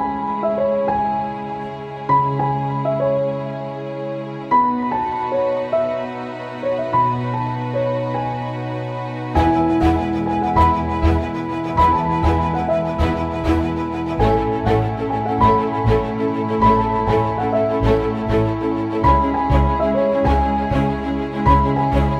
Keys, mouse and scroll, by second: 8.4 shift+click, 9.1 typing, 9.3 ctrl+z, 9.5 click, 10.5-13.9 shift+drag, 13.9-17.2 shift+drag, 17.8 click, 18.0 right click, 18.8-22.1 drag.